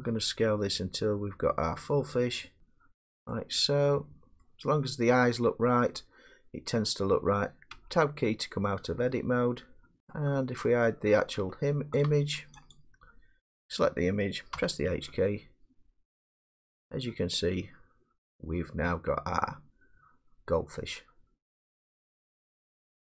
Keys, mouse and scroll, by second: 2.6 click, 3.3 scroll, 4.4-5.5 scroll, 6.6 middle click, 6.8 middle click, 7.7 Tab, 10.1 middle click, 10.7 middle click, 11.4 Tab, 12.1 click, 12.8 click, 14.6 h.